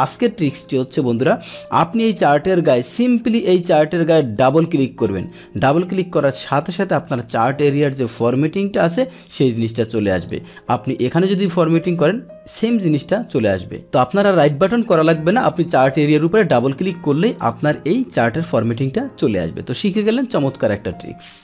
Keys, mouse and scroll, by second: 0.6 click, 1.5 click, 4.3 click, 4.5 click, 10.1 click, 11.0 click, 11.1 click, 12.9 click, 15.9 click, 16.0 click, 17.4 click.